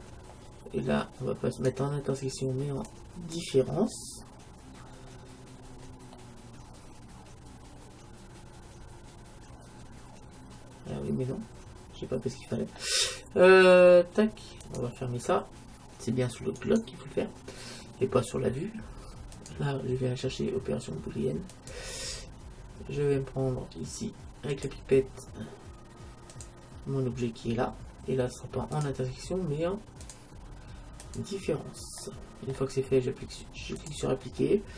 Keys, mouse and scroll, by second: 1.6-3.4 drag, 4.9-8.1 middle drag, 14.6-16.5 drag, 16.6-18.6 right drag, 19.4-21.3 drag, 24.6-26.4 drag, 28.8-32.0 drag, 32.1-33.8 middle drag, 33.8-34.7 drag.